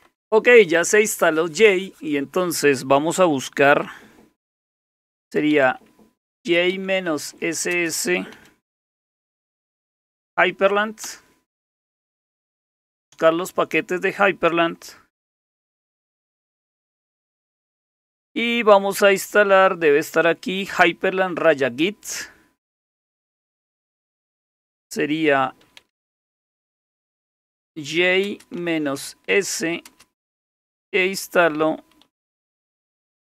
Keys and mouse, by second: 0.0 Return, 5.0-10.8 typing, 11.0 Return, 25.4-29.9 typing, 31.3-33.3 typing.